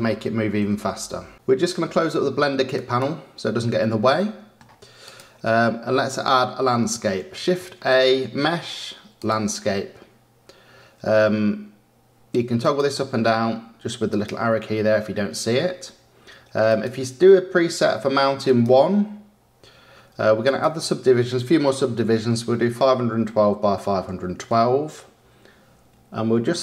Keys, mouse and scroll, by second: 1.3-2.5 drag, 2.7-4.1 drag, 4.1-5.0 middle drag, 5.0 click, 7.1 shift+a, 12.5-19.6 drag, 20.4-23.5 drag.